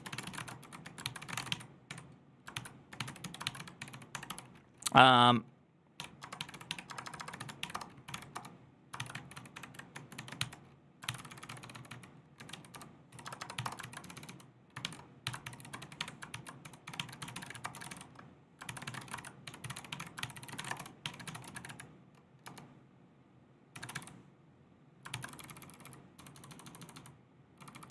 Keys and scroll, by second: 0.0-4.6 typing, 5.8-27.9 typing, 16.2 ctrl+c.